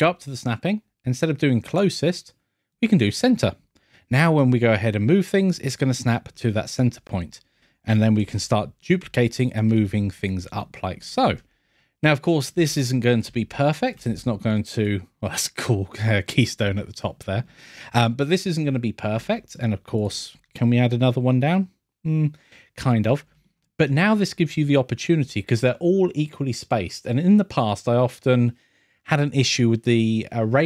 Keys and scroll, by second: 16.3 scroll.